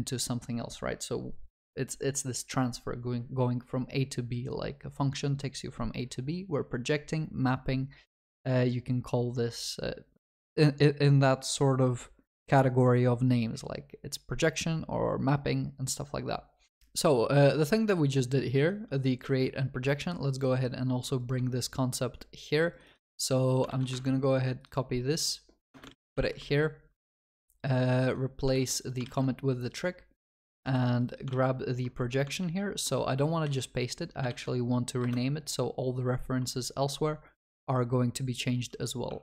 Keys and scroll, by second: 23.7 ctrl+c, 24.0 ctrl+Tab, 26.1 ctrl+s, 32.4 ctrl+z, 33.4 shift+F6, 38.3 ctrl+v.